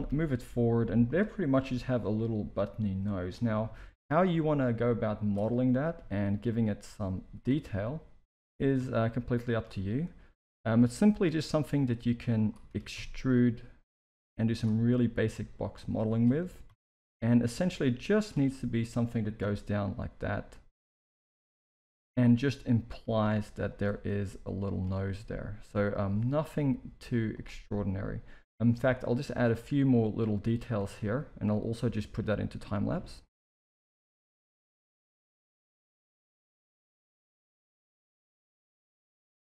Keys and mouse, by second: 0.0 g, 2.0 KP_1, 2.4 s, 3.7 shift+middle drag, 5.6 Tab, 5.9 z, 6.8 a, 7.1 s, 8.4 g, 10.2 ctrl+r, 11.8-12.4 drag, 12.7 e, 14.7 s, 16.4 e, 19.3 KP_3, 21.0 click, 21.5 s, 23.2 g, 24.0 r, 24.8 Tab, 26.4 KP_1, 26.8 z, 29.2 right click, 30.8 Tab, 33.6 ctrl+r, 33.9 z, 34.2 click, 34.7 x, 35.1 click, 35.5 x, 36.1 click, 36.9 click, 37.4 click, 37.8-39.4 typing, 38.1 click.